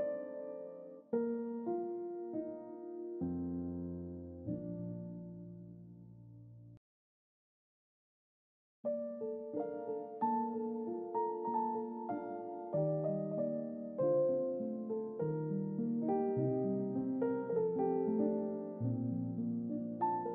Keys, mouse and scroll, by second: 0.8-7.9 drag, 8.5 click, 9.5 click, 10.3 click, 14.2 click, 15.6 middle click, 15.8-16.5 scroll down 2, 15.8 middle click, 16.7 middle click, 17.4-17.8 scroll down 1, 17.8 middle click.